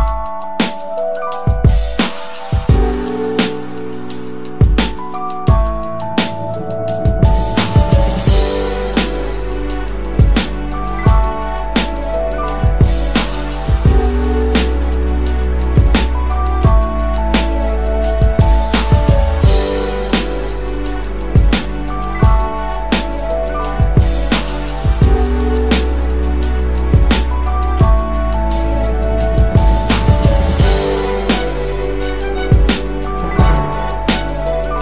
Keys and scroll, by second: 22.8 ctrl+c, 25.1 ctrl+b.